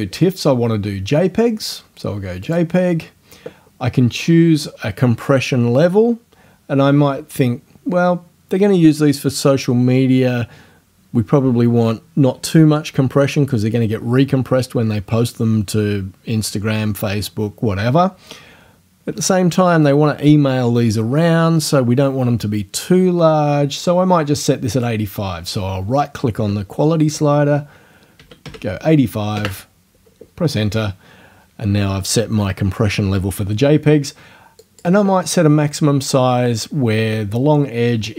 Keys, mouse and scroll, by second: 2.5 click, 24.7 right click, 28.2 KP_8, 28.5 KP_5, 29.3 KP_Enter, 34.6 click.